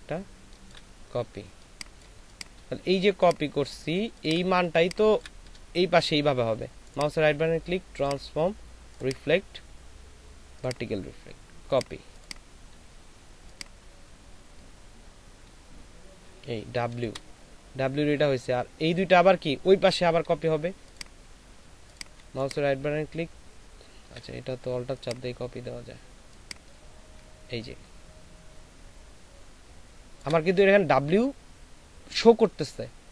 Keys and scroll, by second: 1.6 ctrl+space, 4.5 ctrl+alt+shift+space.